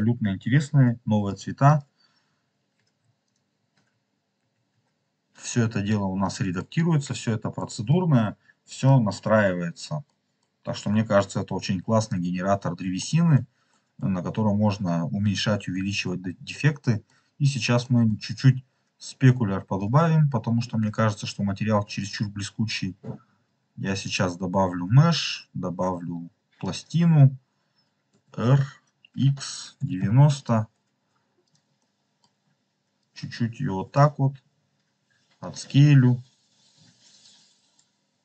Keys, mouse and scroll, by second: 1.6-3.3 drag, 3.7 ctrl+z, 4.3 ctrl+z, 5.6 scroll down 2, 6.1 middle click, 6.8 scroll down 2, 7.5 middle click, 8.3-8.7 scroll down 1, 8.7 middle click, 9.4 scroll down 2, 10.0 middle click, 10.6 scroll up 2, 12.1-12.5 scroll up 3, 12.9 middle click, 13.6 middle click, 16.2 scroll down 4, 16.7 middle click, 17.3-17.7 scroll up 3, 17.7 middle click, 18.5 scroll up 3, 19.7-22.1 drag, 22.9-23.9 scroll down 2, 24.0-26.7 drag, 28.0 r, 29.0 x, 29.7 9, 29.9 0, 30.3 click, 31.3 click, 31.7 middle click, 32.9-33.9 drag, 34.1 s, 35.3 click, 35.9 scroll down 2, 37.1 click.